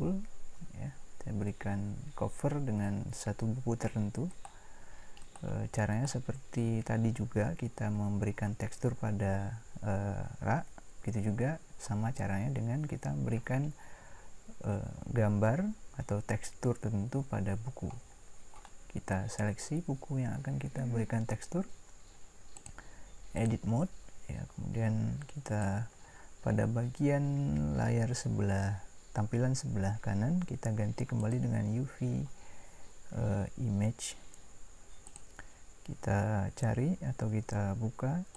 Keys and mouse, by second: 4.3-7.7 right drag.